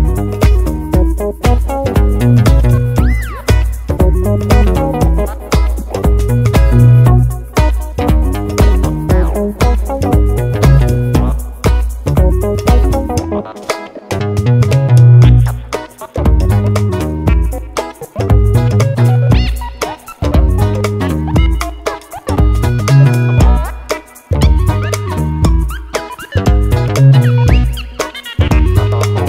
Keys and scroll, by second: 10.0 BackSpace, 14.6 super+c, 16.2 super+v, 23.3 BackSpace.